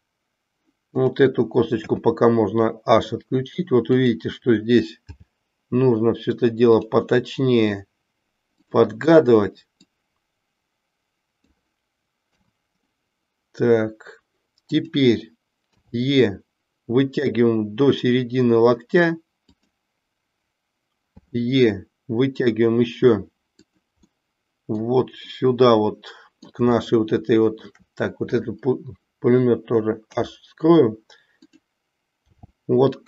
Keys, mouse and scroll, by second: 1.0 click, 1.9 h, 3.9 click, 5.0 g, 7.1 middle click, 8.6 click, 10.0-11.5 drag, 14.6 click, 15.7 e, 21.1 e, 24.1 middle click, 25.4-26.6 middle drag, 26.9 shift+middle click, 28.3 click, 30.0 h, 32.3 g.